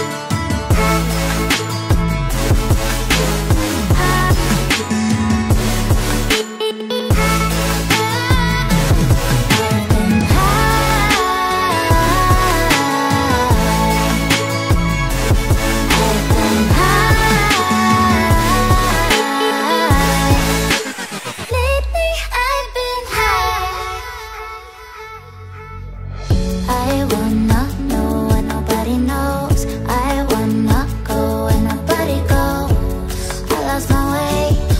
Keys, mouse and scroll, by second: 0.1 alt+scroll down 1, 0.6-0.9 alt+scroll up 5, 1.0 alt+click, 1.5 alt+click, 4.2 double click, 5.1 alt+click, 5.4 alt+click, 5.6 alt+click, 5.9 alt+scroll down 1, 6.1 alt+click, 7.0 ctrl+z, 7.0 ctrl+z, 7.1 ctrl+z, 7.7 alt+scroll down 2, 9.2 alt+click, 9.5 alt+scroll down 1, 11.7 alt+scroll up 1, 11.9 alt+click, 12.2 alt+scroll up 1, 12.5-14.1 typing, 13.0 alt+click, 13.7 alt+click, 14.3 alt+click, 14.6 alt+click, 15.8 alt+click, 15.9 alt+click, 16.5 alt+scroll down 1, 17.1 ctrl+j, 17.2 alt+scroll down 1, 18.1 alt+scroll up 1, 21.3-22.9 typing.